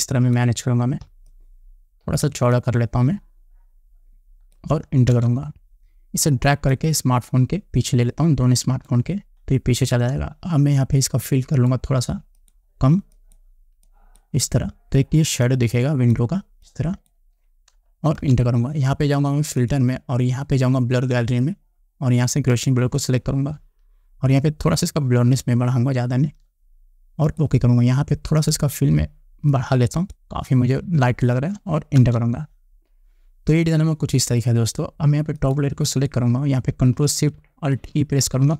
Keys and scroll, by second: 5.7 Return, 18.8 Return, 32.5 Return.